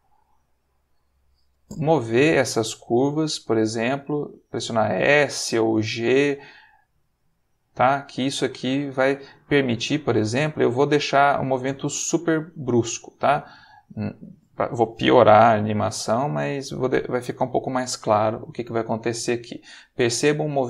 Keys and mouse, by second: 0.4 click, 2.3 click, 2.8 s, 4.5 click, 5.2 click, 5.3 g, 6.2 click, 6.8 click, 6.9 g, 7.9 click, 8.8 click, 9.8 click, 10.5 s, 13.2 click, 14.2 click, 15.0 click, 15.3 g, 17.0 click, 18.5-19.8 drag.